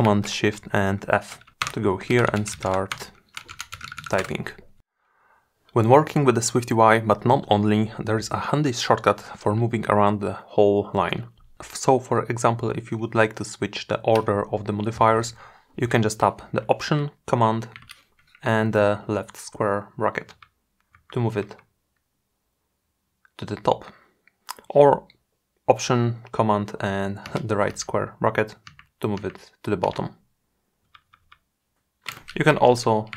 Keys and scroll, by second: 15.3 alt+super+[, 25.4 alt+super+].